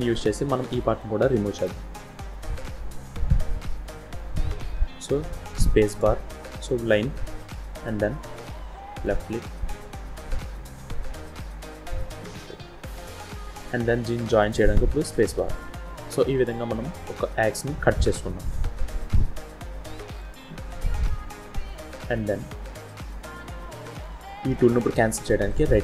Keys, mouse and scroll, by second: 1.4 shift+middle click, 1.8-2.1 scroll up 3, 2.4-3.2 shift+scroll down 4, 3.4 shift+middle click, 4.3 shift+scroll down 1, 15.8-16.8 scroll down 5, 17.2 scroll down 1, 17.4 middle click, 20.2 scroll down 1, 20.4-20.7 scroll up 5, 21.1-23.2 scroll down 1.